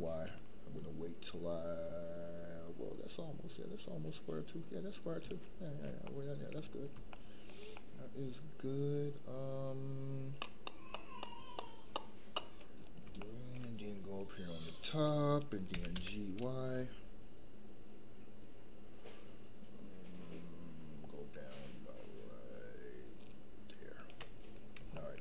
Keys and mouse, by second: 5.2 shift+click, 5.7 middle click, 6.0 shift+middle click, 7.1 shift+middle click, 7.7-8.9 middle drag, 10.9-12.6 middle drag, 13.2 shift+middle click, 14.1-14.6 drag, 15.7 g, 16.0 y, 19.3 shift+middle click, 24.9 shift+middle click.